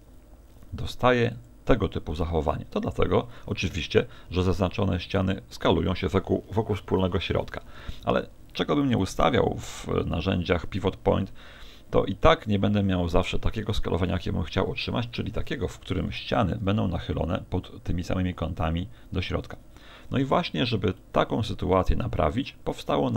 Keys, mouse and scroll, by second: 1.5 click, 9.7 click, 14.6 KP_1, 15.2 KP_3, 16.2 z, 19.8 middle click, 21.0 middle click, 22.2 middle click, 22.6 z, 22.9 middle click.